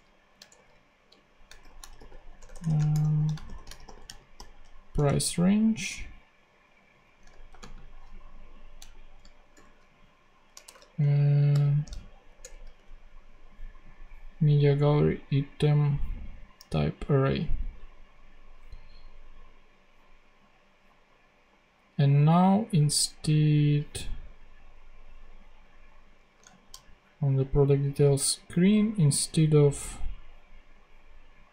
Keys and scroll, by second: 0.0-4.5 typing, 4.9 Return, 7.4 shift+;, 7.5 shift+space, 9.5 shift+/, 10.6 shift+BackSpace, 11.4 shift+m, 12.3 shift+Return, 12.7 [.